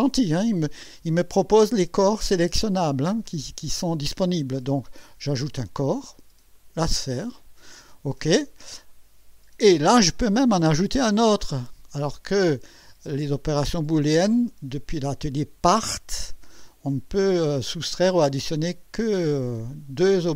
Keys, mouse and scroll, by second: 2.8-4.1 right drag, 5.5 click, 6.5 click.